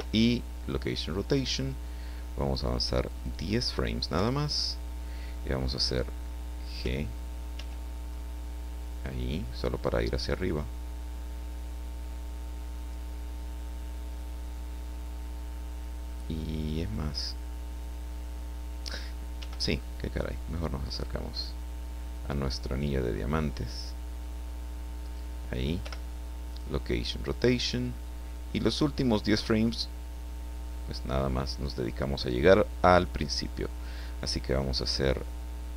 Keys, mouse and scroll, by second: 0.6 click, 3.0 click, 4.1 Left, 6.8 g, 7.6 g, 12.8 click, 19.4 g, 19.6 middle click, 25.0 click, 25.8 i, 26.5 click, 28.3-29.6 drag.